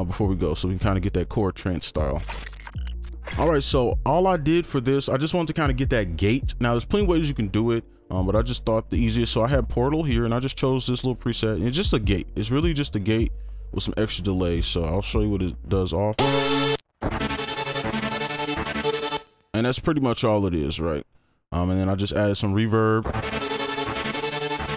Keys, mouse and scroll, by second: 0.3-1.2 scroll down 1, 1.2 right click, 14.8 double click, 16.1 space, 16.7 space, 17.0 space, 19.1 space, 22.1 double click, 23.8 space, 24.3 double click.